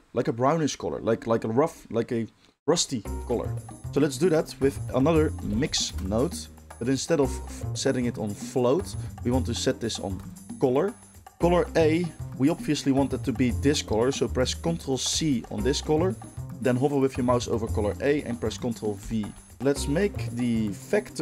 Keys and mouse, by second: 4.1 shift+a, 7.2-8.3 ctrl+middle drag, 8.3-21.2 drag, 15.0 ctrl+c, 18.9 ctrl+v.